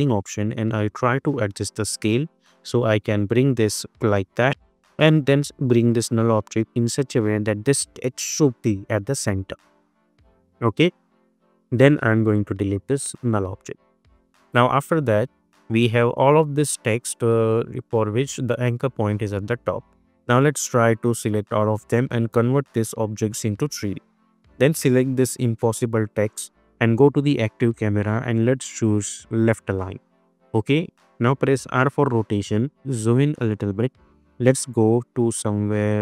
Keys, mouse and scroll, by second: 0.1-2.3 drag, 4.4 v, 5.1-10.7 drag, 14.4 click, 21.4-21.9 drag, 31.6-35.4 typing.